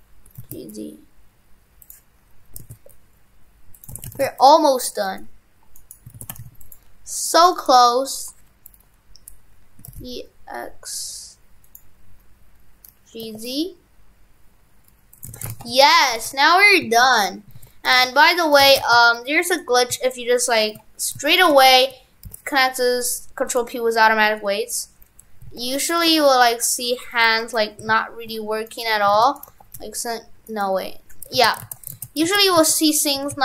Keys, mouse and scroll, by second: 3.9 shift+f, 6.2 shift+f, 7.2 click, 7.6 right click, 9.8 e, 15.3 shift+f, 16.2 shift+f, 17.6 ctrl+Tab, 18.7 shift+f, 19.6 right click, 21.4 shift+right click, 22.3 ctrl+p, 25.5 ctrl+Tab, 26.1 r, 27.9 ctrl+Tab, 28.8 right click, 29.2 ctrl+Tab, 29.4 right click, 29.5 r, 31.4 ctrl+z, 31.7 ctrl+z, 32.0 ctrl+z, 32.4 ctrl+z, 33.2 shift+f.